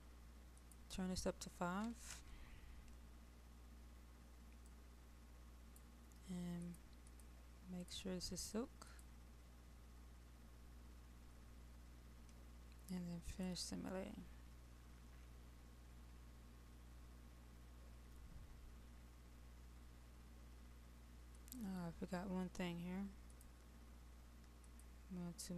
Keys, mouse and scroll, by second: 11.3-25.5 drag.